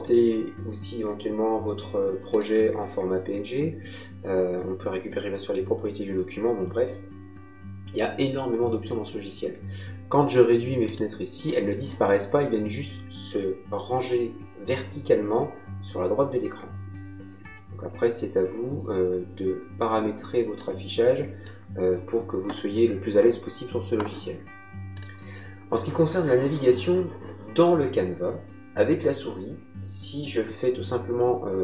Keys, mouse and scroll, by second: 2.2 click, 10.8 click, 20.5 click, 24.8 click.